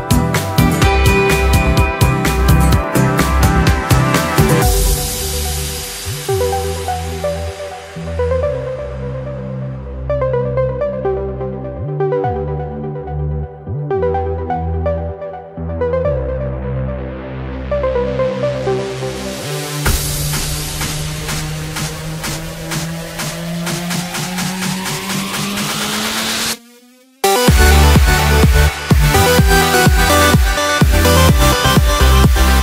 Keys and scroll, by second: 0.7 Return, 4.7 Escape, 5.4 Return, 6.3 Escape, 7.2 Delete, 7.6 alt+z, 7.8 alt+a, 7.9 Escape, 9.4 Return, 10.1 Escape, 10.3 ctrl+d, 11.9 alt+a, 13.1 Return, 16.6 Escape, 17.6 Delete, 17.9 alt+a, 19.0 Escape, 20.5 Return, 20.7 Escape, 23.9 Return, 24.7 Escape, 25.5 Return, 29.0 alt+a, 29.9 Return, 30.4 Escape, 31.5 alt+7, 31.9 Escape.